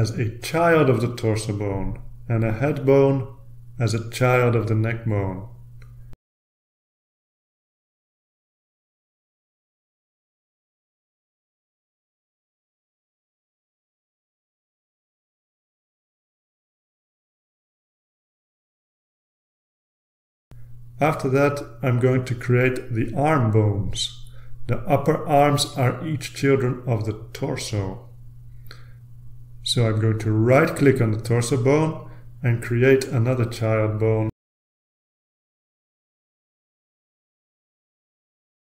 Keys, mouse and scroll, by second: 0.3 right click, 2.2 click, 4.4 right click, 5.3 click, 7.0-8.5 drag, 11.1 click, 12.9-14.1 drag, 14.4-15.8 typing, 15.8 Return, 18.5 click, 20.1 click, 22.7-23.7 drag, 24.0-25.7 typing, 26.1 Return, 28.0-29.5 scroll down 2, 31.9 click, 32.5 right click, 34.1 click, 36.7 click, 38.4-38.7 drag.